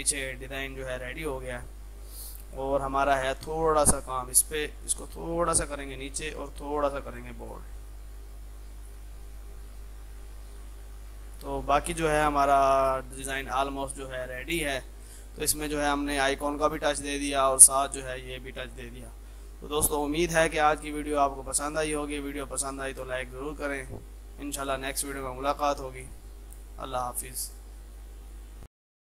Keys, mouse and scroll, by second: 2.5 click, 2.8 F2, 3.0-9.4 drag, 8.9-9.6 typing, 10.8 click, 11.6 shift+F2, 12.7 click.